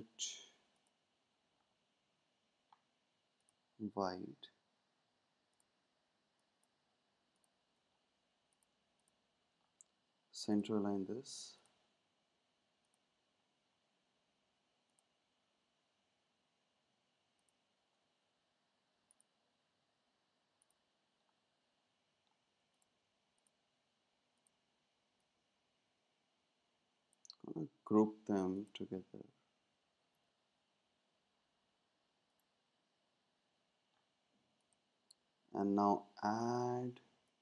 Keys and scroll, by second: 30.1 super+g.